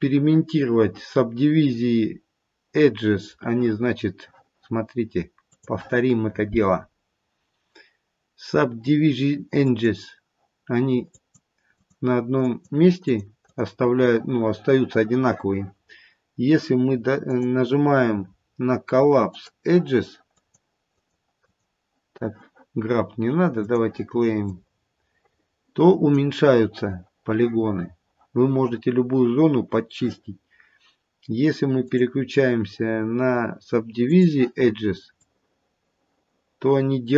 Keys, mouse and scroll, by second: 3.9-6.0 scroll up 1, 6.0 click, 6.0-6.8 scroll up 1, 6.8-7.5 scroll up 6, 8.0-8.4 scroll down 1, 9.6 click, 11.0 click, 11.7 click, 12.4 click, 13.0 click, 13.4 click, 17.2 click, 20.3 click, 20.8 click, 21.4 click, 23.7 click, 24.4 click, 32.1 click, 35.1 click.